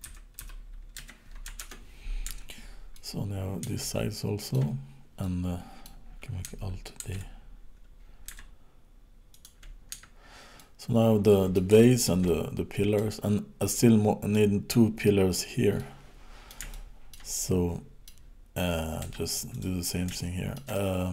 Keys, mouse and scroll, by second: 2.2 Tab, 2.9 middle click, 3.8 shift+middle click, 5.2 middle click, 7.0 alt+d, 9.9 Tab, 10.6 middle click, 11.8 shift+middle click, 12.2 middle click, 13.7 middle click, 15.7 middle click, 16.7 shift+middle click, 17.3 middle click, 19.0 Tab, 19.5 click, 20.1 shift+middle click, 20.8 middle click.